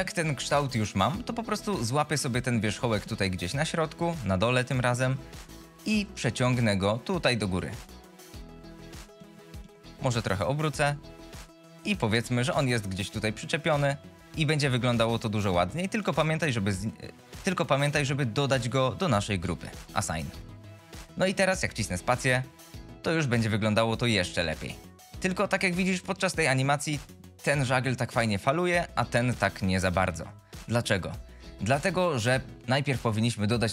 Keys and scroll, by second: 3.2 1, 6.7 g, 20.3 alt+a, 20.9 Tab, 21.7 space, 30.3 space.